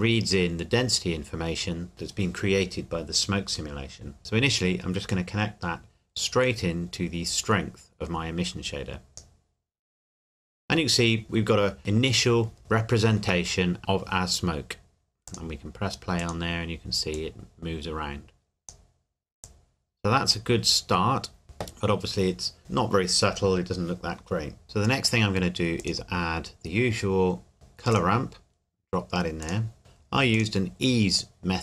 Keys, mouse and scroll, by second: 5.1 click, 12.6 middle click, 15.3 click, 21.4 middle click, 24.6 click, 24.8 middle click, 25.8 click, 27.9 click, 29.8-30.3 scroll up 1, 30.3 click.